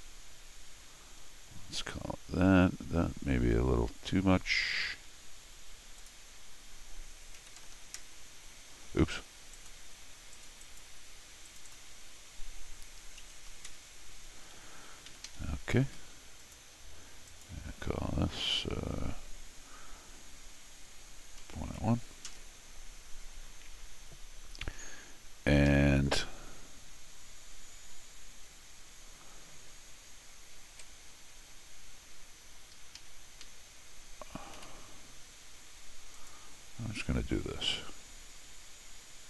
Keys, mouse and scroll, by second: 1.2-1.7 scroll down 2, 2.3-2.7 scroll up 1, 3.5 middle click, 6.0 click, 9.5 click, 10.3 click, 10.6 click, 11.5 click, 11.7 click, 14.9 Escape, 15.2 Escape, 15.9 d, 16.4 click, 17.3 click, 25.7 Escape, 30.7 alt+l, 32.8 Escape, 33.0 Escape, 33.4 Escape, 34.6 l, 36.1 click.